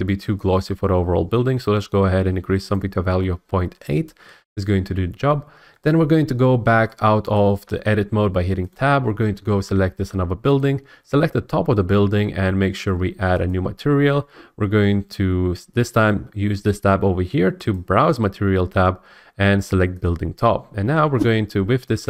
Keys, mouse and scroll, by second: 2.7 click, 7.3-7.6 scroll, 7.6 Tab, 8.7 click, 10.1 Tab, 10.6 click, 13.5-15.6 drag, 17.7-19.9 drag, 20.0-22.0 drag.